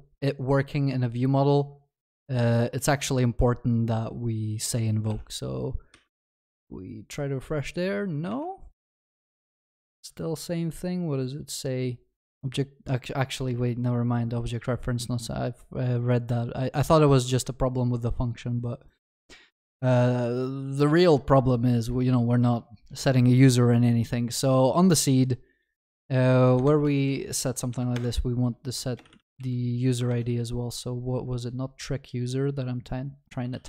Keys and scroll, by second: 28.0 Return, 30.1 ctrl+BackSpace.